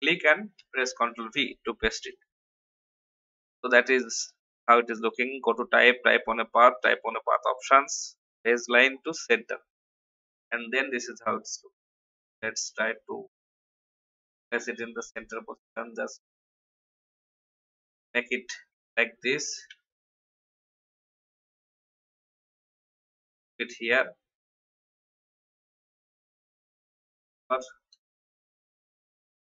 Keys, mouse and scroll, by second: 0.5 ctrl+v, 2.1 click, 4.0 click, 12.0 Right, 12.2 Left, 13.9-18.9 drag, 19.7 shift+Up, 20.9 Down, 22.6-24.9 drag, 25.4 shift+click, 26.8 shift+t, 27.1 click, 27.9 ctrl+x, 28.2 BackSpace.